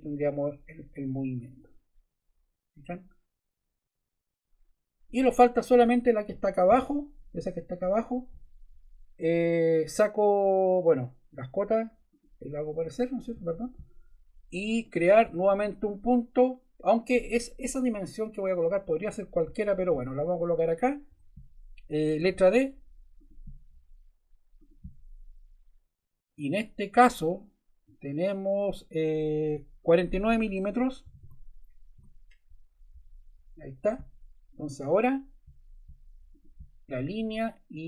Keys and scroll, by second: 21.1 Escape, 22.1 d, 31.0 4, 31.9 Return.